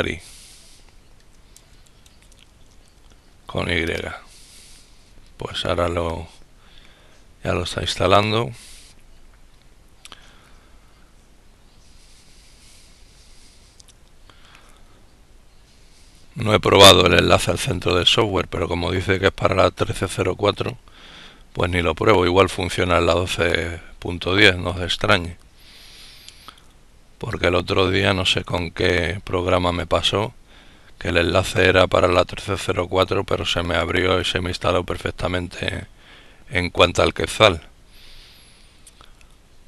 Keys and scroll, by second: 0.0-1.0 typing.